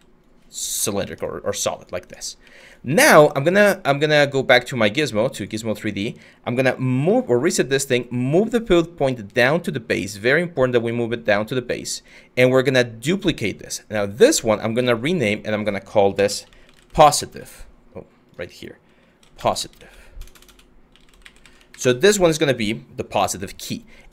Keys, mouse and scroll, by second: 2.8 w, 15.7-22.0 typing.